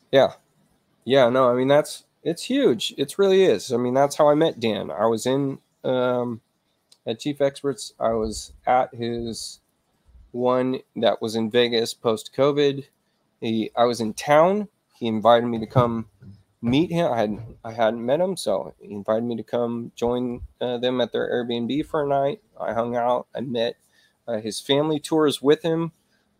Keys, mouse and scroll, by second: 9.5 click, 12.8 click.